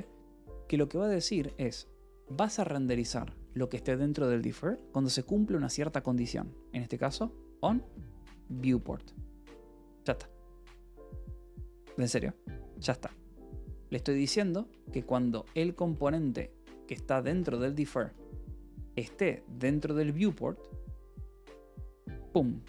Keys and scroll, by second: 7.4-9.0 typing, 13.2-16.7 typing, 14.6 Return, 14.8 Escape, 17.9 k, 18.2 l, 19.5 v, 20.1 e.